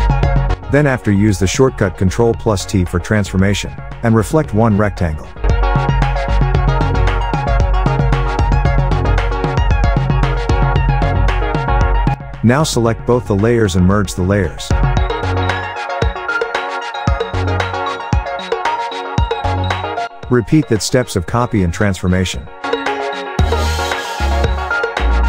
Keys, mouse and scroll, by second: 1.9 click, 1.9 right click, 3.2 click, 5.6-6.4 alt+scroll up 2, 6.7-7.7 shift+drag, 7.9-8.7 alt+scroll up 2, 9.0-10.0 shift+drag, 10.2-11.1 alt+scroll down 2, 11.2 shift+click, 12.6 right click, 14.9-18.3 drag, 16.5-16.9 shift+click, 17.3-18.1 shift+click, 18.3 alt+shift+scroll down 2.